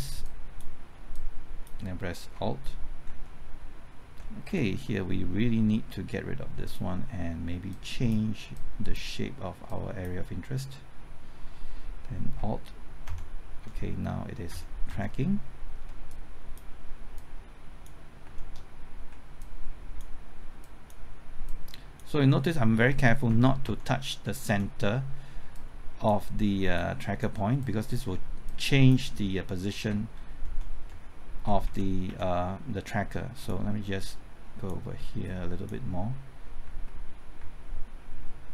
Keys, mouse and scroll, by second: 2.3 typing, 3.1 alt+Right, 4.5 Left, 6.7 click, 13.1 alt+Right, 14.5 alt+Right, 14.9 typing, 16.1-18.2 drag, 18.2 typing, 18.4 alt+Right, 19.4-20.4 drag, 22.7-23.6 typing, 22.9 alt+Right, 23.6 alt+Right, 24.5 alt+Left, 25.5 click, 30.5 alt+Right, 30.9 alt+Right, 32.1 ctrl+Left, 33.1-36.4 drag, 36.6 typing.